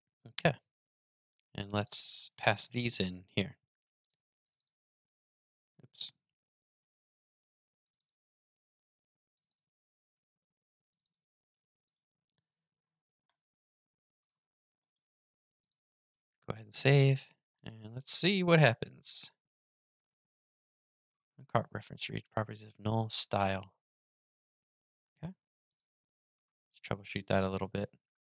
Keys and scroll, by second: 2.1 super+c, 3.2 super+v, 4.8 super+x, 5.7 super+z, 6.5 super+c, 8.2 super+v, 9.9 super+c, 11.2 super+v, 15.8 super+s, 18.1 super+r.